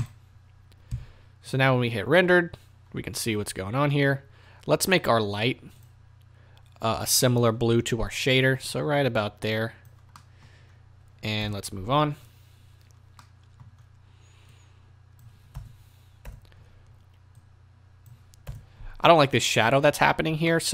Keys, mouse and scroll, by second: 0.0 click, 1.5 z, 2.9-3.3 scroll down 1, 3.3 scroll up 1, 8.7 click, 10.2-14.5 middle drag, 10.6-11.4 scroll down 2, 11.4 KP_0, 12.0-12.3 scroll down 2, 12.3-12.8 scroll up 2, 12.8-13.2 scroll down 2, 13.7-14.5 scroll down 2, 14.5-20.5 drag, 15.6 KP_0, 18.4 KP_0, 20.5-20.7 middle drag.